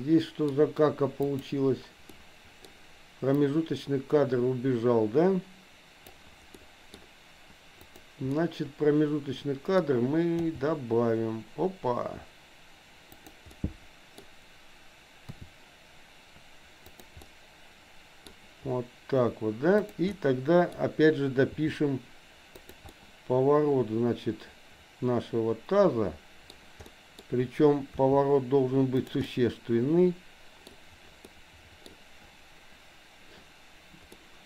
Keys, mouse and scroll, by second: 1.2 click, 2.1 middle click, 3.5-6.2 drag, 6.5 middle click, 7.9 click, 8.4-9.7 middle drag, 10.4 g, 13.5 middle click, 15.4 r, 17.2-18.2 middle drag, 19.9 click, 20.1 middle click, 21.5 r, 22.9-26.5 middle drag, 26.9 middle click, 27.9 r, 29.2-30.6 middle drag, 31.2 middle click, 34.1 middle click.